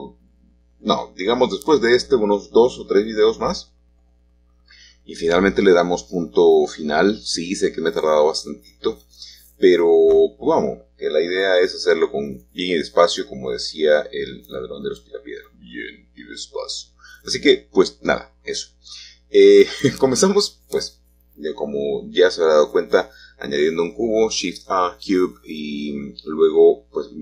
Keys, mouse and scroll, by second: 4.8 g, 7.6-9.4 drag, 9.4-10.2 scroll up 1, 9.6-12.0 shift+middle drag, 12.0-13.1 drag, 13.6 s, 16.8-19.1 drag, 20.2-21.4 scroll up 1, 21.4-21.9 shift+scroll down 1, 21.9 middle click, 23.1-24.2 middle drag, 24.7-25.8 drag, 26.1-27.2 drag.